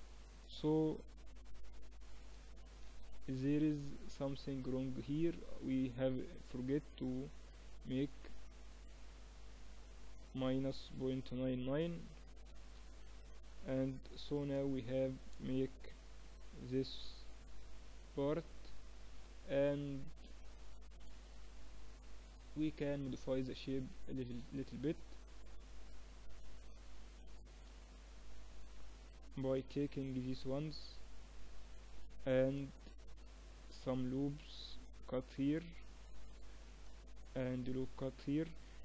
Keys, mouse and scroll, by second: 1.0-3.0 middle drag, 2.5 shift+b, 5.0-8.2 middle drag, 7.3 ctrl+r, 12.8 Tab, 13.8 shift+b, 15.8 shift+b, 17.6-22.2 middle drag, 22.2 Tab, 22.8 middle click, 25.1 ctrl+r, 27.6 middle click, 29.0 ctrl+r, 32.0 ctrl+r, 36.2 ctrl+r, 38.5-38.8 drag.